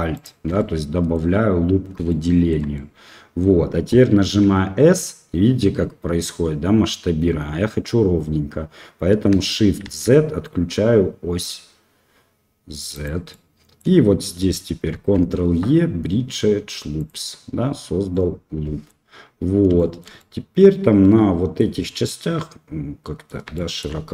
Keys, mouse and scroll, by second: 0.1 alt+shift+click, 0.5 middle click, 2.0 shift+middle click, 2.7 middle click, 4.2 s, 13.2 click, 14.9 ctrl+e, 18.1 middle click, 19.7 shift+middle click, 20.1-21.5 middle drag, 21.8 middle click, 22.7 click, 23.5 shift+middle click.